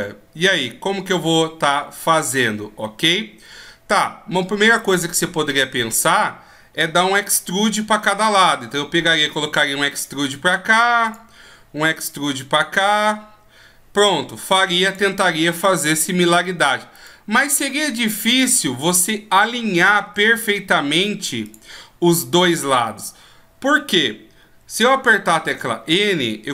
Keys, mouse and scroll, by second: 9.1 e, 12.0 right click, 12.6 right click, 13.0 e, 17.0 right click, 17.3 e, 19.7 right click, 20.0 e, 25.4 n.